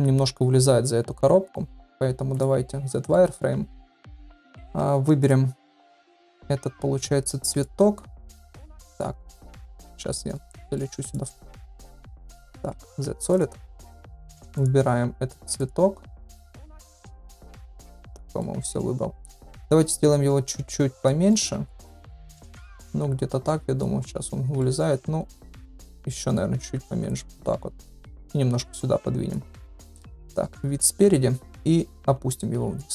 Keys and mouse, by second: 1.9 z, 2.8-3.2 middle drag, 4.1 click, 4.4 shift+middle drag, 5.2 shift+click, 6.0 shift+click, 7.5 shift+click, 8.5 ctrl+z, 8.9 shift+click, 10.1 middle drag, 10.7 middle click, 12.0 shift+middle drag, 12.8 z, 13.7 middle drag, 14.6 drag, 15.6 shift+click, 16.3 shift+click, 17.6-18.4 middle drag, 19.1 middle click, 19.8 s, 21.3-21.7 middle drag, 22.1-23.8 middle drag, 24.5-25.5 middle drag, 26.2 middle drag, 26.6 s, 27.9-29.4 drag, 29.6 middle click, 30.1 KP_1, 31.8 g.